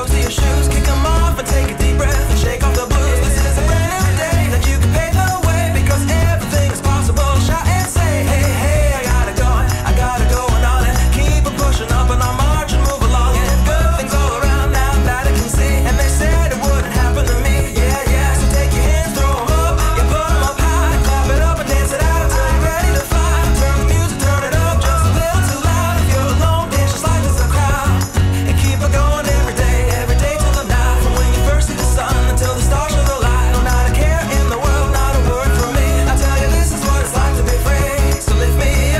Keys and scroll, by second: 0.2 i, 1.5 d, 3.5 i, 4.1 alt+i, 4.4 alt+b, 5.9 alt+i, 8.3-9.2 typing, 10.4 super+c, 15.0 shift+super+v, 16.2 shift+super+t, 18.3 super+c, 20.1 shift+super+v, 21.0 shift+super+v, 25.6 alt+shift+super+v, 27.5 alt+super+w, 32.0 super+c, 32.5 shift+super+a, 34.2 alt+shift+super+v, 35.7 shift+super+v, 36.5 shift+super+v.